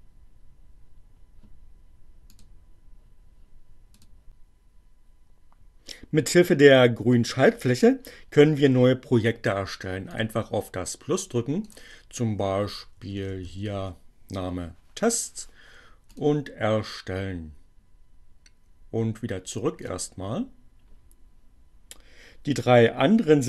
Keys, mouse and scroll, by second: 4.3 click, 9.8 click, 11.6 click, 11.8-13.0 typing, 15.1 click, 19.8 click.